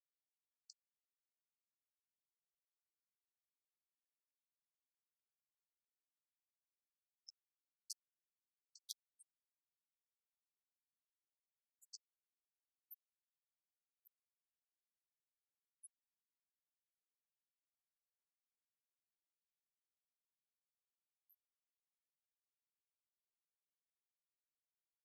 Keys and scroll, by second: 0.5 ctrl+Right, 1.4 ctrl+Down, 2.3 ctrl+Left, 3.2 ctrl+Up, 5.7 ctrl+Right, 6.7 ctrl+Down, 8.2 ctrl+Right, 9.2 ctrl+Down, 11.9 ctrl+Right, 12.4 ctrl+Left, 13.2 Down, 19.6 ctrl+Right, 20.1 ctrl+Left, 21.4 ctrl+Down, 22.5 ctrl+Right, 24.7 ctrl+Up.